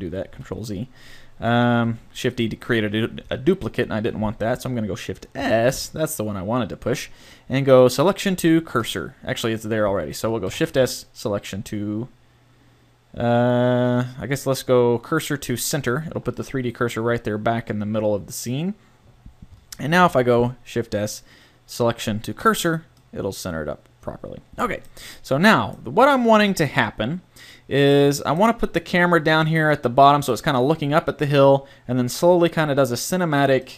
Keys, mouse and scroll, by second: 1.8 g, 2.4-4.2 drag, 5.4 shift+s, 10.4 shift+s, 16.4 middle click, 17.0 middle click, 19.9 shift+s.